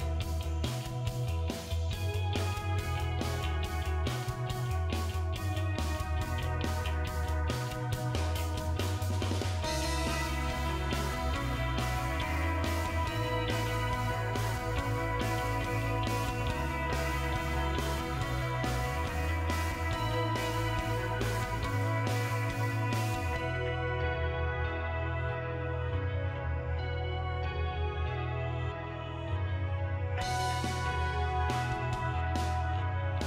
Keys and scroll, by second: 17.0 Delete, 18.4 Delete, 19.6 Delete.